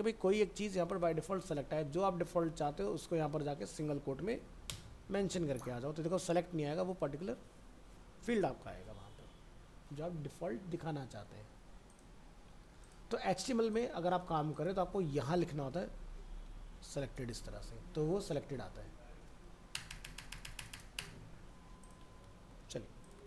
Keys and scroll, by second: 1.3 alt+Tab, 2.2 ctrl+v, 3.8 ctrl+shift+Left, 5.1 ctrl+s, 5.7 alt+Tab, 22.2 ctrl+s.